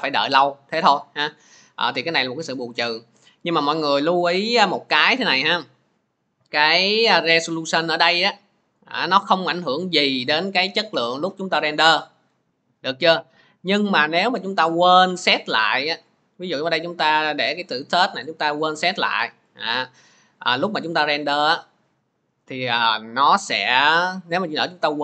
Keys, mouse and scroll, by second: 4.4 click, 7.6 click, 16.0 click, 19.3 click.